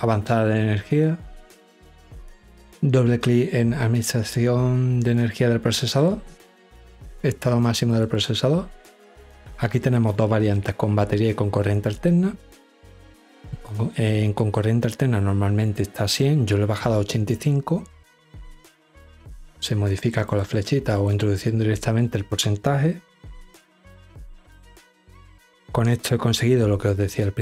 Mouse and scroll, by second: 0.7 click, 3.9 click, 5.4 click, 5.6 click, 6.3 middle click, 7.6 click, 7.8 click, 8.4 middle click, 18.5 click, 18.7 click, 19.1 click, 19.5 click, 19.8 click, 20.1 click, 20.5 click, 21.0-21.5 drag.